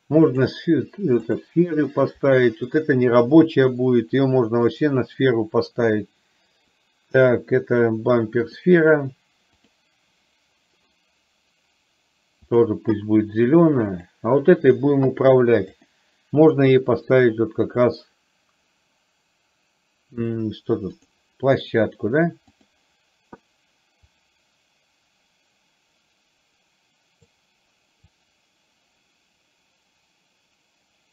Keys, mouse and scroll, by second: 0.5 click, 4.7-8.8 drag, 12.6 click, 15.7-21.2 drag, 22.6 click, 24.2-27.3 drag, 28.1-31.1 drag.